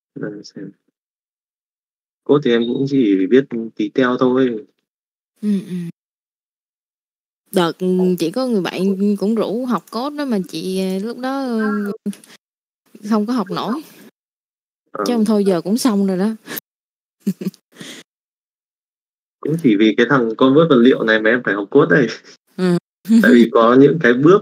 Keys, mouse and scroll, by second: 0.4 click, 1.7 middle click, 3.0 click, 3.9 middle click, 4.6 shift+middle click, 5.3 click, 7.0 click, 9.2 click, 11.1 middle click, 11.7 middle click, 13.3 click, 14.5 shift+middle click, 14.9 shift+middle click, 15.7 middle click, 16.9 click, 17.3 alt+a, 17.4 middle click, 18.7 middle click, 19.4 click, 22.1 middle click, 24.0 click, 24.3 middle click.